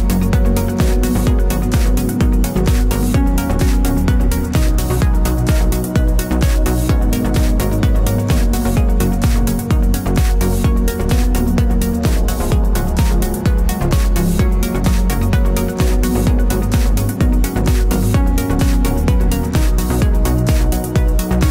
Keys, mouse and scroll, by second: 0.6 click, 0.9 Tab, 1.7-4.6 middle drag, 2.6 z, 4.6 click, 5.9 Tab, 7.8 click, 9.4 z, 11.0 click.